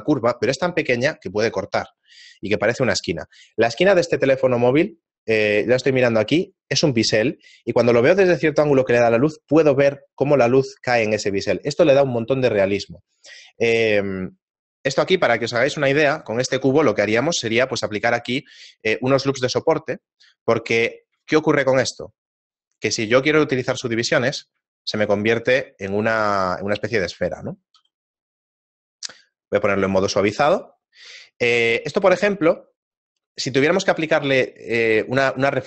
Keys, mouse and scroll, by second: 15.3 scroll down 3, 16.1 middle click, 16.1-16.6 scroll down 1, 16.6 Tab, 17.0 shift+middle click, 17.6 middle click, 19.2 shift+middle click, 19.2-20.1 scroll down 1, 20.6 Tab, 28.4 click, 28.4 t, 28.9 click, 30.4 right click, 30.8 middle click, 31.8-33.6 scroll up 3.